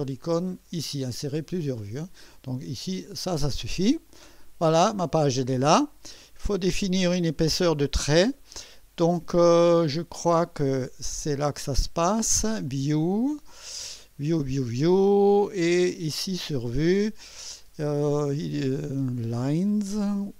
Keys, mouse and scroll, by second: 2.8 click, 4.1 click, 6.1-6.5 scroll down 1, 11.1 click, 12.7 click, 15.8 click.